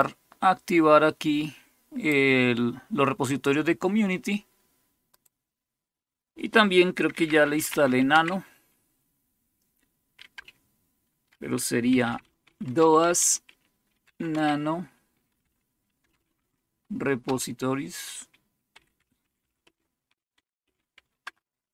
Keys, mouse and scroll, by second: 0.0-2.1 drag, 5.1 click, 6.9-8.1 typing, 10.3-16.0 typing, 16.3 Tab, 17.2 Return, 18.4-21.4 typing.